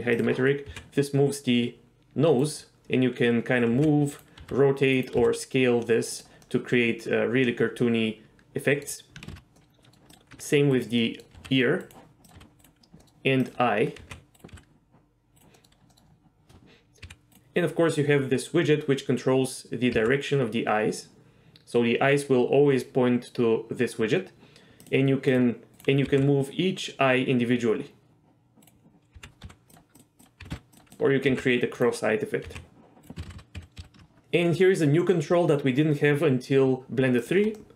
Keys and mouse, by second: 0.1 click, 0.7 g, 2.4 right click, 3.7 g, 4.2 right drag, 4.4 r, 5.2 s, 6.1 click, 6.4-8.8 middle drag, 9.3 ctrl+z, 9.6-9.9 middle drag, 10.1 click, 10.3 g, 10.7 right click, 11.0 middle drag, 11.4 r, 11.8-12.3 right drag, 12.3 click, 12.3 r, 12.6 right drag, 13.0 middle drag, 14.0 g, 14.3 right drag, 14.5 s, 15.5 middle click, 15.9 middle drag, 17.0 g, 20.0 g, 24.8 click, 25.3 click, 25.7 g, 26.1 g, 29.1-31.3 typing, 29.7 drag, 30.0 click, 30.9 click, 32.5 g, 33.2 ctrl+z, 33.3 ctrl+z, 33.5 ctrl+z, 33.6 ctrl+z, 33.8 ctrl+z, 37.2 click, 37.6-37.7 middle drag.